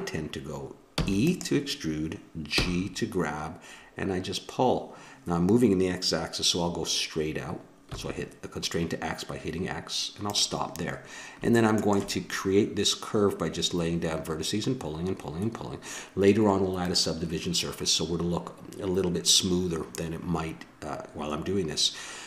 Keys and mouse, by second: 0.9 e, 2.5 g, 7.1-10.8 drag, 11.6-17.8 drag.